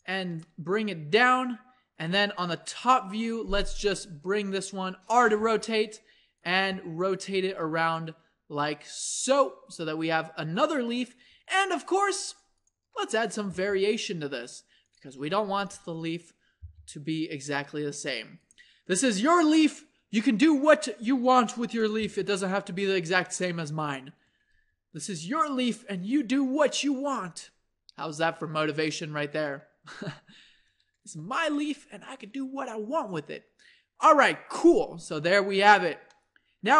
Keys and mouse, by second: 0.5 click, 2.7 KP_7, 4.5 r, 5.4 g, 6.7 r, 7.3 g, 9.5 middle click, 10.8-13.1 middle drag, 13.1-14.2 middle drag, 13.5 g, 15.3 a, 15.7 b, 16.6 g, 19.2 click, 22.0 g, 23.5 click, 24.5 g, 31.1 Tab.